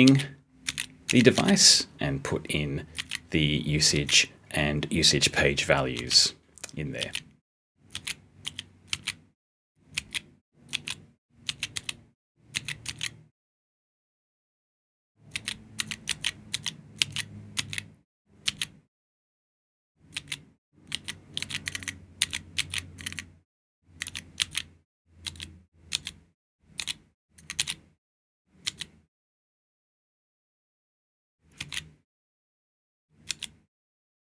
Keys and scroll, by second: 0.0-1.8 typing, 2.9 *, 3.9 g, 5.9 z, 6.9 a, 7.8 g, 8.4 p, 8.8 s, 9.9 g, 15.7 *, 23.9 *, 27.3 *.